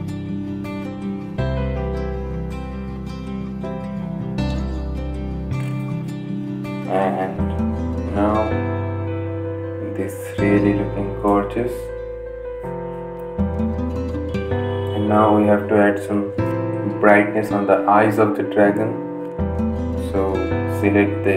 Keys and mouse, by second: 15.3 click, 19.6 right click, 20.6-21.3 drag.